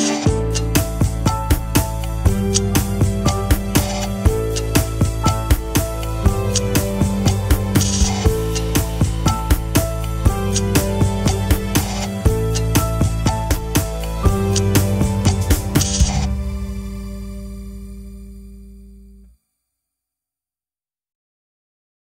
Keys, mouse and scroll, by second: 13.1 scroll down 1, 14.3-15.3 scroll down 1, 15.3-17.1 scroll up 1.